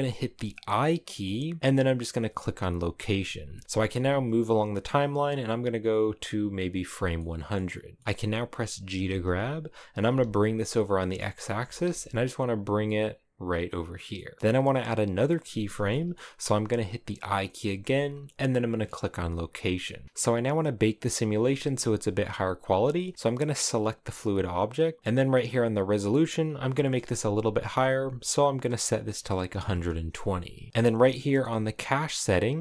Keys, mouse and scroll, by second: 2.8 i, 3.7-5.9 drag, 7.0-8.6 middle drag, 8.6 g, 10.8 middle click, 10.9-11.2 scroll up 2, 11.3 g, 13.7-14.0 scroll down 1, 14.0-19.3 middle drag, 19.3 i, 20.0-22.8 drag, 22.8 shift+middle click, 23.0 right click, 29.5-30.7 drag.